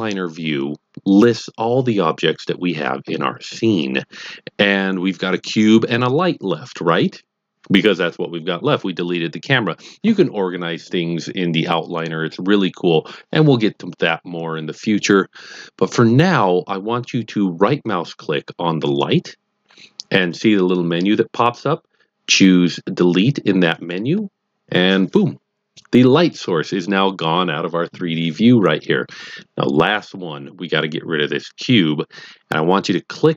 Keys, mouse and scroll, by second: 5.2 click, 5.8 click, 18.9 right click, 23.7 click.